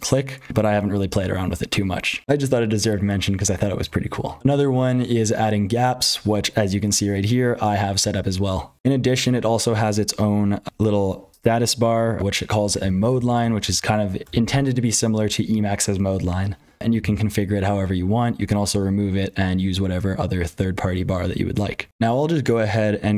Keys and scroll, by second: 0.0-23.1 typing, 2.2 F12, 8.7 F12.